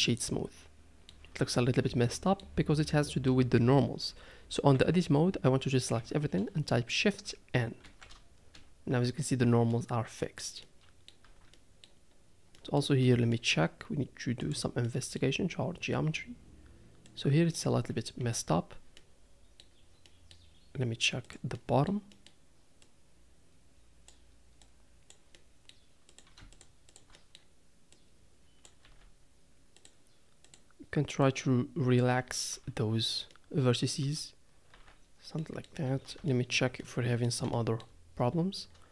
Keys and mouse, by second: 0.3-1.1 middle drag, 2.0-2.4 middle drag, 3.0-3.3 middle drag, 5.2 Tab, 6.3 a, 8.0 shift+n, 9.1 Tab, 9.7-10.4 middle drag, 10.6-11.1 middle drag, 11.2 Tab, 11.5 middle click, 11.6 middle click, 12.5 middle click, 13.3 shift+middle click, 14.4 click, 14.8 middle click, 17.2 click, 18.2 KP_Decimal, 19.0 middle click, 20.1 middle click, 21.2 click, 21.6 middle click, 22.1 middle click, 22.8-24.1 drag, 24.6-25.1 drag, 25.3 middle click, 26.1 click, 26.5 shift+click, 26.9 shift+click, 27.1 middle click, 28.0 click, 28.8 s, 30.4 click, 31.2 click, 32.9 Tab, 33.3-33.9 middle drag, 34.0 Tab, 34.7 Tab, 35.5 middle drag, 36.3 shift+middle drag, 36.8-37.3 middle drag, 37.5 shift+middle click.